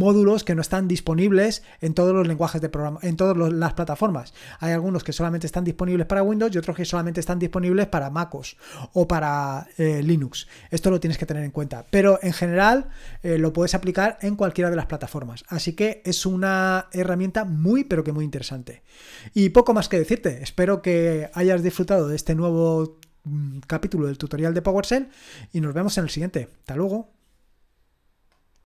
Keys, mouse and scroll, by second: 28.5 click.